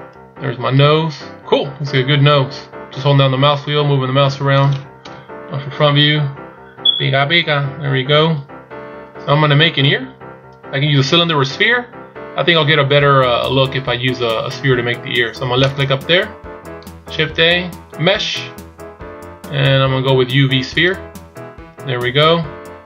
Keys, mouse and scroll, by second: 5.2 KP_1, 6.0-7.0 scroll down 7, 8.3 scroll up 2, 9.0-9.6 scroll down 1, 9.6 scroll down 1, 9.7 shift+scroll up 2, 16.0 click, 17.2 shift+a.